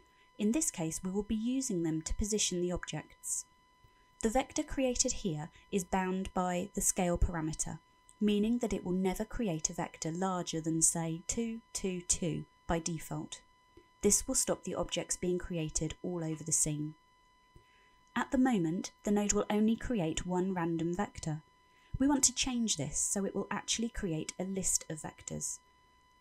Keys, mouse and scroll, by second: 0.0 middle click, 10.8 middle click, 11.5-12.0 scroll up 5, 12.0 middle click, 16.4-17.1 scroll down 5, 17.1 middle click, 18.4 middle click, 19.4 scroll down 1, 20.1 middle click.